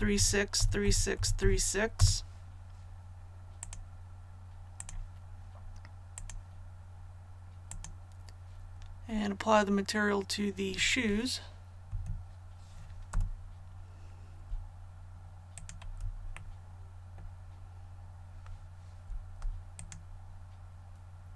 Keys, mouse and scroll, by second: 0.0-1.3 typing, 3.5 click, 11.8 i, 13.0 a, 15.5 alt+right click, 16.3 middle click, 19.7 alt+shift+right click.